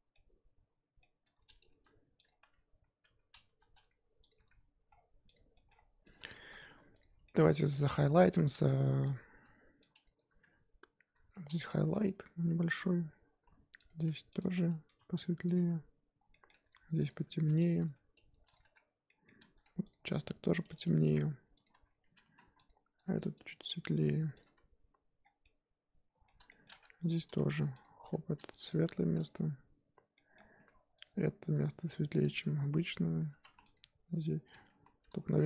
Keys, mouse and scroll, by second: 0.1-1.2 middle drag, 1.2 Tab, 1.7 g, 2.4 Tab, 3.0 Tab, 3.5 g, 4.4 Tab, 4.9-5.3 scroll down 1, 5.3 click, 5.5 middle drag, 5.7-6.1 scroll up 3, 6.1 click, 6.2 Tab, 6.4 3, 7.0 alt+click, 7.3 middle drag, 7.4-8.7 scroll up 1, 8.7 alt+click, 9.1 alt+click, 12.0 g, 12.8 Tab, 13.3 Tab, 13.9 alt+click, 14.9 g, 15.5 Tab, 16.1 scroll down 2, 16.3 middle drag, 16.5 Tab, 17.1 alt+click, 17.9 g, 18.6 Tab, 19.1-19.4 middle drag, 19.4 Tab, 19.9 alt+click, 21.1 g, 21.7 Tab, 22.2 Tab, 22.7 alt+click, 23.8 g, 24.4 Tab, 25.2 scroll down 4, 25.4-26.7 middle drag, 26.7-27.2 scroll up 5, 26.8 Tab, 27.2 3, 27.8 alt+click, 28.7 g, 29.3 Tab, 30.1 middle click, 30.4 Tab, 31.0 alt+click, 31.8 g, 32.4 Tab, 33.0 Tab, 33.7 alt+click, 34.7 ctrl+z.